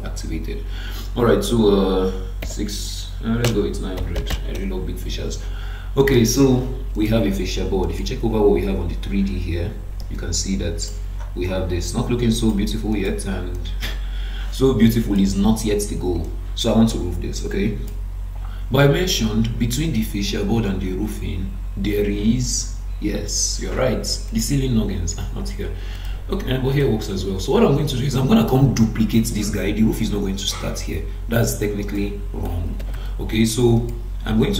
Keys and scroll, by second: 3.4 BackSpace, 4.5 Return, 32.8 ctrl+d.